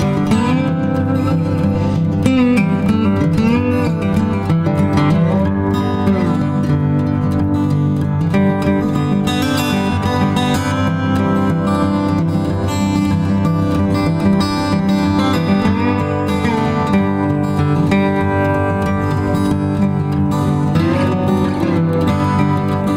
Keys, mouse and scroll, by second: 0.9 shift+click, 1.8 alt+click, 2.1 shift+click, 3.1 shift+click, 3.3 alt+click, 4.1 space, 4.3 ctrl+alt+click, 5.3 shift+click, 6.8 shift+click, 14.9 ctrl+click, 16.3 Delete, 18.0 Delete, 18.8 w, 21.6 space, 22.3 alt+click, 22.4 z.